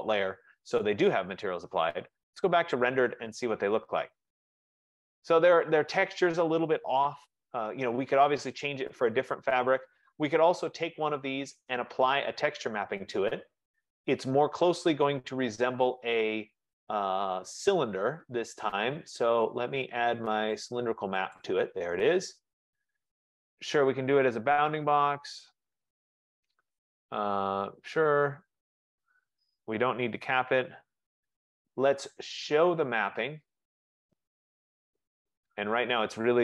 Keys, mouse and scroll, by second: 1.5 click, 2.8 click, 4.0 F15, 4.4 middle click, 4.8 middle click, 5.5 middle click, 8.6 middle click, 8.9 middle click, 9.9 middle click, 10.5 click, 12.6 click, 22.1 click, 26.0 Return, 27.5 Return, 30.0 n, 30.3 Return, 34.0 click, 35.3 click.